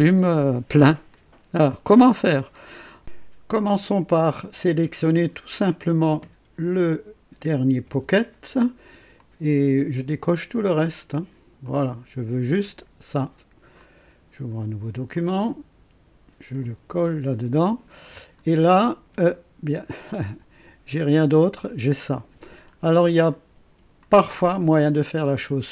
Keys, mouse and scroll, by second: 1.1 click, 2.2-2.7 scroll up 2, 2.7 right click, 4.6 click, 7.8 c, 9.1 click, 10.6 click, 11.6 click, 13.7 click, 15.1 click, 16.8 ctrl+v, 17.9 ctrl+scroll up 1, 18.7-20.0 drag, 22.7 scroll up 1, 23.2-24.1 right drag, 25.2 click.